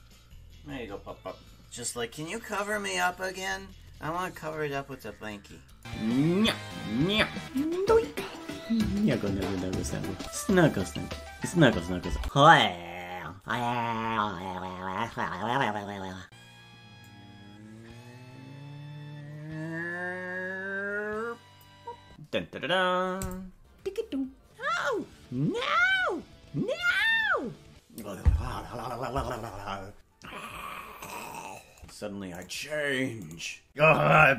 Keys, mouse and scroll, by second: 7.8 space, 10.4 click, 10.4 space, 16.3 shift+right click, 17.0 click.